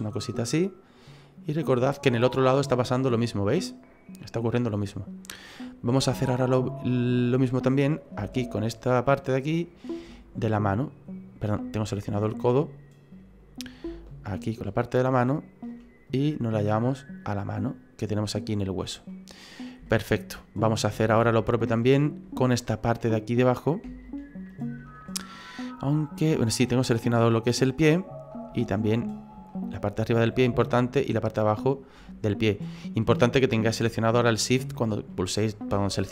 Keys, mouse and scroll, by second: 1.1 click, 1.8 middle click, 2.3-2.9 scroll down 4, 2.6 middle click, 5.1-5.5 scroll up 3, 5.5 middle click, 6.0 shift+middle click, 7.0-8.2 scroll up 2, 8.2 scroll up 1, 8.3 alt+shift+right click, 11.1-11.8 scroll down 4, 11.8 right click, 13.1 right click, 13.4-14.0 scroll up 3, 14.0 alt+shift+right click, 14.1 alt+shift+right click, 16.0 click, 17.6 middle click, 19.1 middle click, 19.8 shift+middle click, 20.6 shift+middle click, 24.1 alt+shift+Right, 25.0 middle click, 26.3 middle click, 29.5 shift+right click, 30.0 middle click, 31.0 shift+right click, 32.0 middle click, 35.8 shift+middle click.